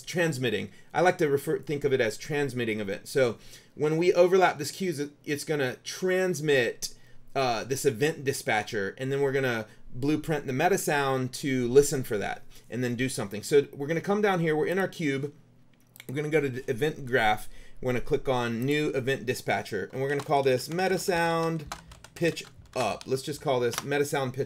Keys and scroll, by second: 20.0-23.5 typing, 23.9 Return.